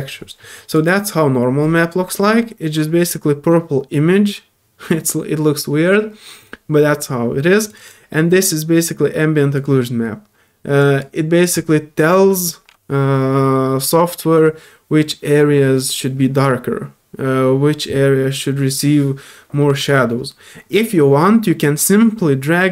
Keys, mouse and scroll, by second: 0.7 click, 0.8 click, 6.4 click, 7.6 click, 7.7 click, 7.8-9.5 right drag, 9.5 click, 10.8 click, 11.4 click.